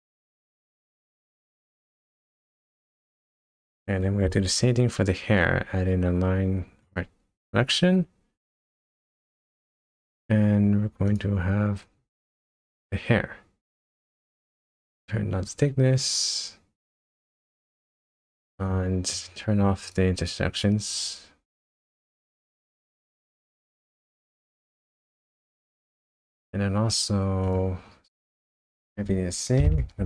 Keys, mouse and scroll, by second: 0.5 shift+middle click, 2.4 scroll up 2, 3.0 click, 3.4 scroll down 2, 4.0 shift+a, 9.5 click, 11.1 click, 14.7 click, 17.2 shift+middle click, 19.3 scroll up 1, 19.8 click, 20.9 click, 22.1 click, 23.8-24.3 shift+scroll down 3, 24.5 shift+scroll up 1, 24.6 shift+middle click, 27.4 click, 28.5 click.